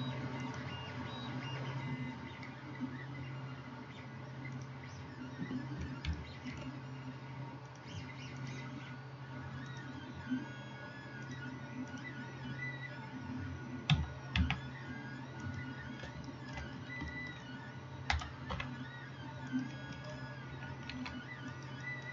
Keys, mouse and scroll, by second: 6.1-6.6 shift+middle drag, 7.7-14.0 middle drag, 14.0 s, 15.7-22.1 middle drag, 18.2 s, 21.0 ctrl+r.